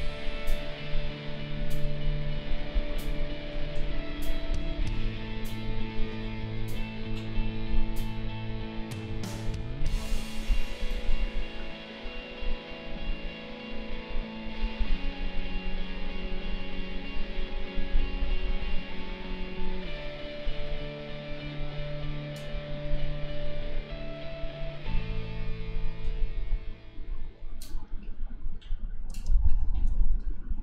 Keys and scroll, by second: 29.2 space.